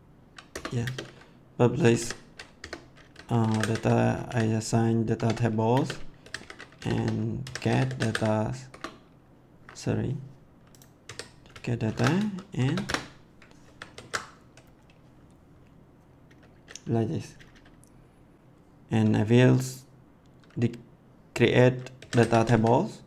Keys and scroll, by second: 0.5 Return, 0.8 space, 2.5-4.2 typing, 5.1 Tab, 5.7-8.5 typing, 8.7 Return, 11.0 a, 11.8 shift+9, 12.5 shift+[, 12.8 Return, 13.6 ctrl+s, 21.7-23.0 typing.